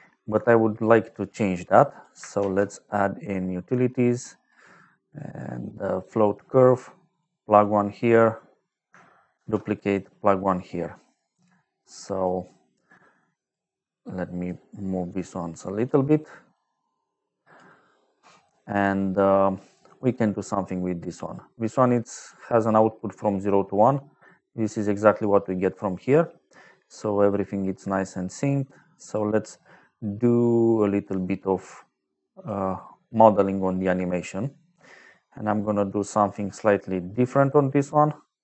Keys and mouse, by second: 0.8 click, 1.9 click, 2.3 shift+a, 5.9 click, 7.0 click, 7.5 click, 9.3 shift+d, 9.8 click, 10.6 middle click, 11.2 click, 12.8 click, 13.8 click, 15.0 click, 15.7 click, 16.0 click, 16.8 click, 22.0 click, 24.6 click, 28.2 click, 31.0 click, 33.3 click, 34.8 middle click, 37.8 click.